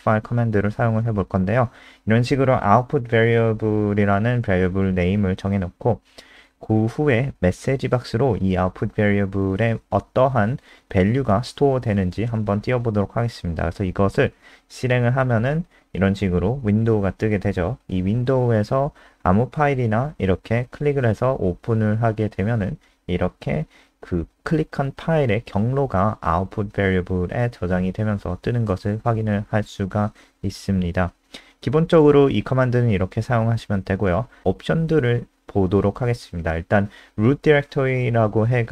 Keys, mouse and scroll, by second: 0.0-1.2 typing, 7.0-11.9 typing, 8.9 Delete, 14.1 click, 14.6 F5, 17.8 click, 33.7 Up, 34.1 End, 34.4 typing.